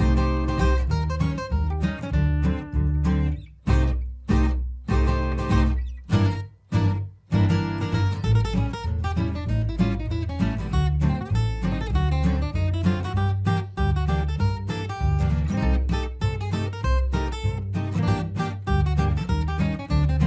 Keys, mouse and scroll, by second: 0.7 Escape, 1.2-14.9 drag, 15.6 F3, 15.7 Escape, 16.3-18.4 alt+drag, 18.4 ctrl+g, 19.2-20.2 drag.